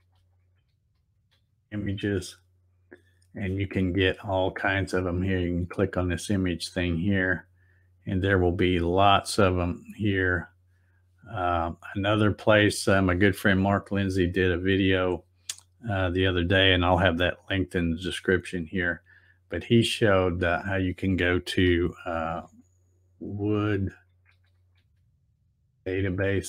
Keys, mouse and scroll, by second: 0.4-1.8 typing, 5.2 click, 7.4-7.8 scroll down 2, 9.3 scroll down 1, 10.1 scroll down 2, 11.9-12.9 scroll down 8, 18.7 scroll down 1, 19.6-20.0 scroll up 1, 20.4 click, 22.1-25.1 typing.